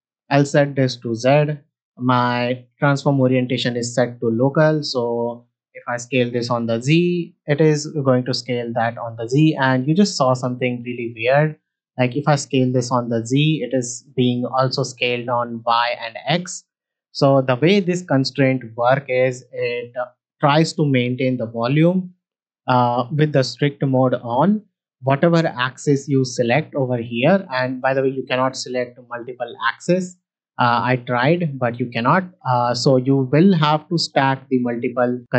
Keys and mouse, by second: 0.4 click, 1.2 shift+middle drag, 2.2-4.5 drag, 4.8 middle click, 6.2 s, 6.3 z, 12.0 s, 12.1 z, 17.2 middle drag, 25.8 click, 26.2 click, 26.8 click, 28.1 click, 29.3 shift+click, 30.8 ctrl+click, 35.1 click.